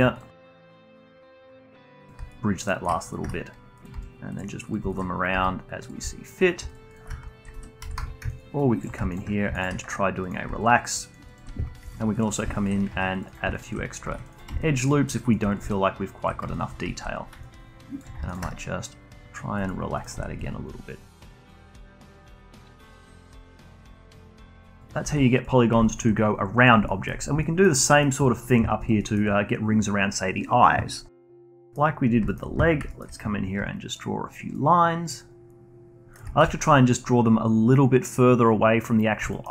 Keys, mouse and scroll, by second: 0.3 shift+click, 0.9-2.3 shift+right drag, 2.3-3.1 alt+drag, 3.2 1, 3.7 click, 3.9 g, 4.6 click, 4.9 alt+click, 5.3 g, 6.0 alt+click, 6.9 alt+shift+click, 7.8 a, 7.9 a, 8.3 ctrl+right click, 9.5-10.6 shift+right drag, 10.6-11.8 alt+drag, 11.8 ctrl+r, 12.5 alt+click, 12.9 ctrl+r, 13.5 alt+click, 14.0 ctrl+r, 14.6 alt+click, 15.7-17.4 alt+drag, 17.4-19.9 ctrl+right drag, 19.9 click, 20.3-22.7 alt+drag, 22.8-23.2 alt+drag, 23.2 g, 23.9 click, 24.1 g, 24.7 click, 25.0 g, 25.6 scroll down 1, 25.8 alt+click, 26.8 alt+middle click, 27.2 scroll down 1, 27.4 alt+middle click, 28.2 alt+click, 28.6 scroll up 1, 28.8 alt+click, 29.0-31.2 alt+middle drag, 31.6 middle click, 32.0 scroll up 1, 32.2-33.5 alt+middle drag, 33.5 d, 33.9 click, 34.5-35.0 d, 35.1-36.1 drag, 36.1 d, 36.4-39.3 alt+drag, 39.3 alt+middle click.